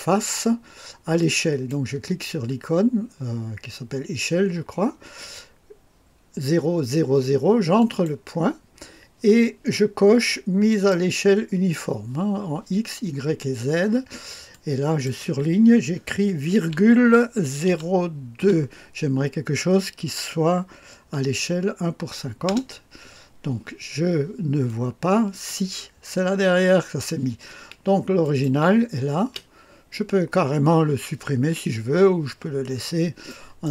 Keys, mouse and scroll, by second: 1.2 click, 7.8 click, 10.7 click, 14.5-15.6 drag, 16.8 ,, 17.6 KP_0, 18.4 KP_2, 22.5 Return, 24.6 click, 28.2 click, 29.2 space, 32.7-33.7 scroll up 2, 33.3 middle click.